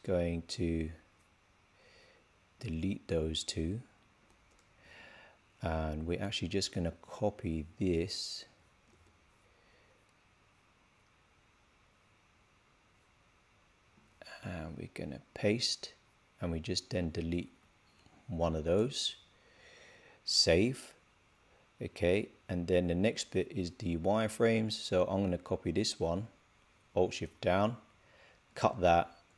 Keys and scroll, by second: 8.8 super+c, 15.2 super+v, 20.3 super+s, 28.4 super+x.